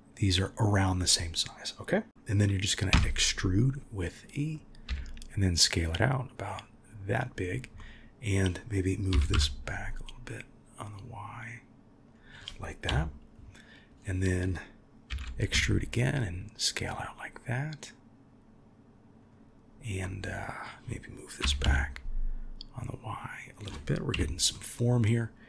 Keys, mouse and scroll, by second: 7.7 middle click, 9.1 g, 12.8 KP_1, 15.1 e, 20.0 middle click, 21.4 g, 24.1 KP_1.